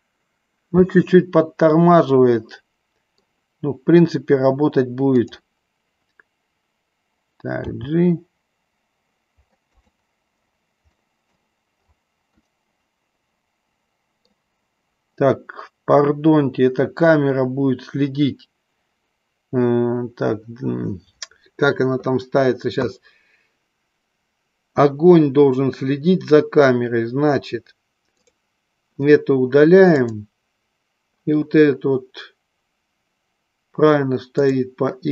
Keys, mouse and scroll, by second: 2.2-3.3 middle drag, 7.7 g, 9.9 click, 11.1 scroll up 1, 11.2 middle click, 12.6-14.4 middle drag, 30.1 click, 34.6 click.